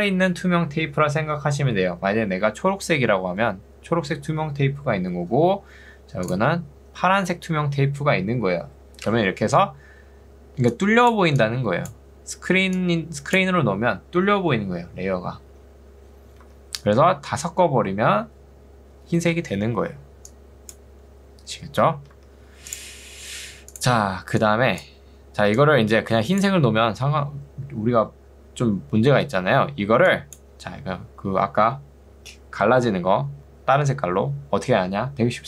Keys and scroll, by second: 9.4 ctrl+2, 16.6 Escape, 19.8 ctrl+2, 22.2 Escape.